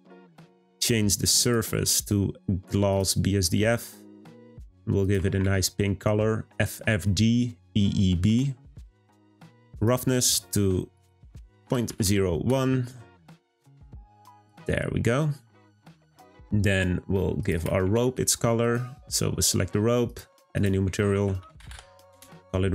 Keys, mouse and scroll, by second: 1.4-4.3 drag, 10.9-13.9 drag, 14.4 click, 18.6 click, 20.1-22.7 drag.